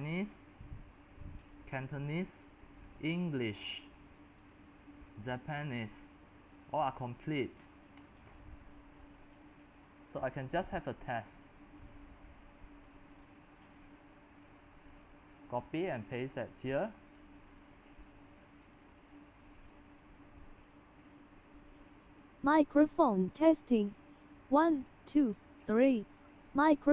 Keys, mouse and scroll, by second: 0.1-1.6 scroll down 2, 1.6-2.4 scroll down 1, 2.4-3.0 scroll down 1, 3.0-3.7 scroll down 1, 3.7 middle click, 3.7-5.6 scroll down 4, 5.6-6.2 scroll down 1, 6.2-6.7 scroll down 3, 6.7-7.4 scroll up 4, 7.4-9.6 scroll up 25, 9.6 scroll up 1, 9.7-14.4 drag, 14.4-16.3 right drag, 16.3 click, 16.6 right click, 17.4-26.8 drag.